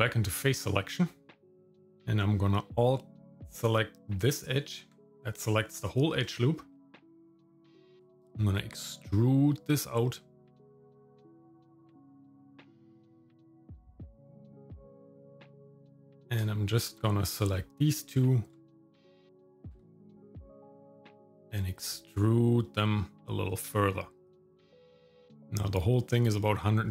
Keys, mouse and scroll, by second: 4.2 alt+click, 6.3 shift+middle click, 7.9 e, 12.6 shift+middle click, 13.3 scroll up 1, 13.7 shift+middle click, 14.1 scroll down 1, 14.7 shift+middle click, 16.0 click, 16.7 shift+click, 17.6 shift+middle click, 19.7 e, 24.7 Tab.